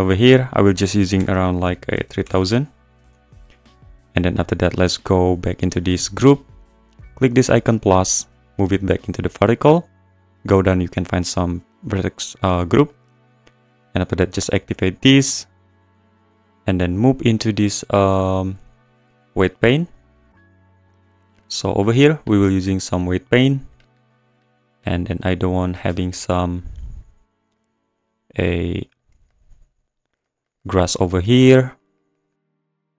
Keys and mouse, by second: 0.4-3.1 drag, 1.3 BackSpace, 2.2 0, 2.4 0, 5.8 click, 7.3 click, 8.5 click, 10.5 click, 11.9 click, 13.5-14.7 drag, 15.1 click, 17.7-19.4 drag, 20.9 click, 21.4 middle click, 24.7 `, 25.8 `, 27.7 click, 28.9 click, 29.3 click, 31.6 click, 32.0 click, 32.7 click.